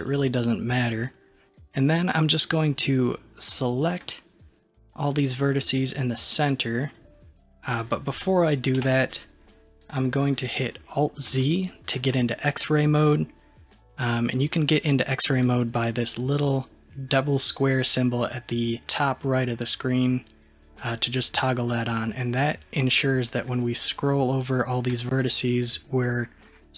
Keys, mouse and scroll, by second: 1.5 click, 3.5 click, 9.5 KP_3, 11.4 alt+z, 22.1 click, 23.3 drag, 26.1-26.7 middle drag.